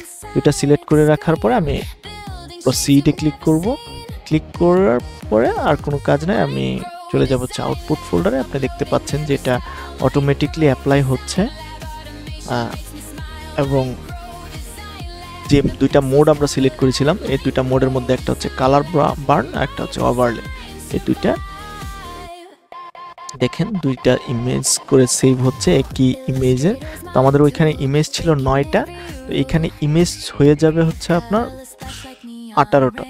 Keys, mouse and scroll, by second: 5.6 click, 13.4 right click, 20.3-23.5 drag.